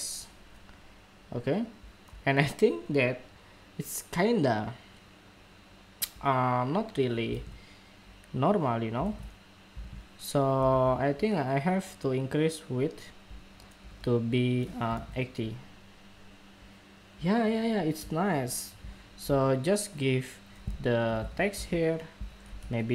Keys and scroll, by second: 7.0 super+Tab, 8.8 super+Tab, 9.6 super+Tab, 10.4 super+Tab.